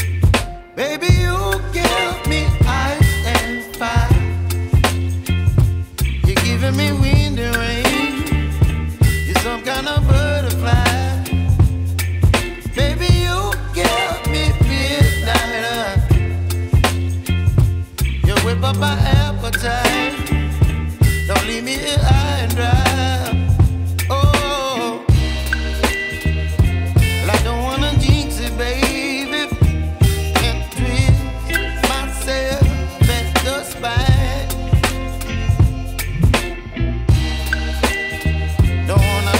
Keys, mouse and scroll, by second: 5.6 Return, 5.8 scroll down 1, 14.9-15.2 scroll down 1, 15.2-15.8 scroll up 1, 15.8 middle click, 21.8 middle click, 22.6 right click.